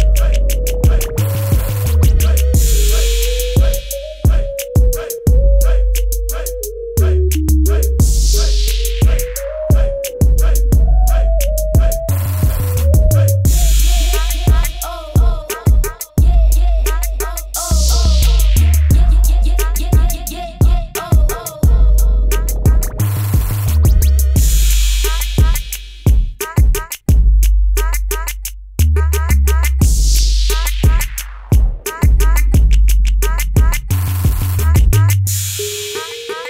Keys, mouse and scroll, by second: 3.7 Tab, 4.6 click, 6.0-7.1 scroll up 1, 7.5 click, 9.1 ctrl+alt+click, 11.0-11.6 scroll down 1, 14.4 t, 15.0 click, 16.0 KP_Enter, 16.2 ctrl+t, 17.5 Return, 17.8 alt+click, 18.2 t, 20.2 KP_Enter, 20.8 click, 23.8-25.0 scroll up 1, 25.0 click, 28.6 click, 31.2 KP_6, 31.4 Tab, 31.8 KP_4, 32.0 Tab, 35.3 click.